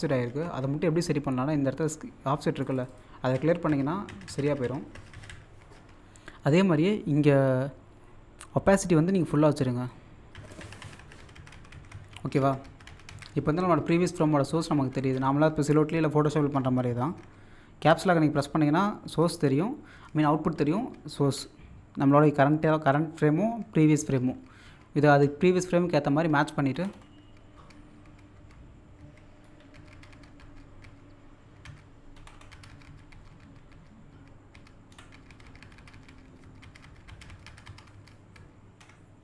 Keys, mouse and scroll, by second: 2.6 click, 3.8-4.1 scroll up 1, 4.7 scroll up 1, 9.1 click, 26.8 Up, 29.5 Right, 29.8 typing, 31.4-34.2 typing, 32.2 Up, 34.9 Right.